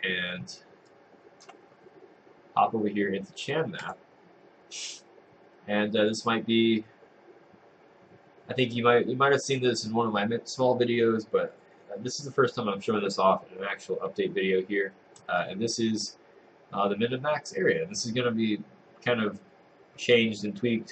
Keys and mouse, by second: 0.9 click.